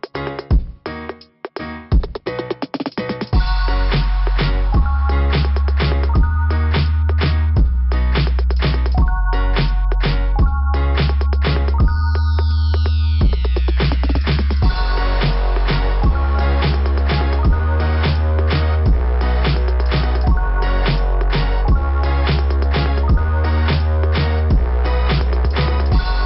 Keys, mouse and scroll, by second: 1.1 click, 1.2 click, 2.3 click, 3.0 click, 4.3 click, 4.4 click, 7.3 click, 16.8 click, 17.1 click, 17.4 click, 17.7 click, 18.0 click, 18.3 click.